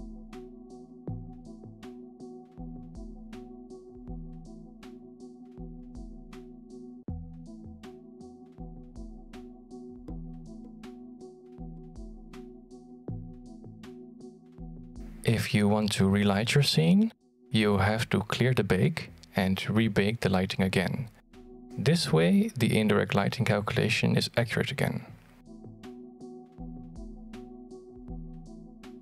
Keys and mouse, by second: 0.0 click, 0.5 middle click, 2.2 middle click, 4.1-4.9 shift+middle drag, 5.5 middle click, 7.2 middle click, 10.0 click, 11.7 shift+middle drag, 16.9 shift+middle click.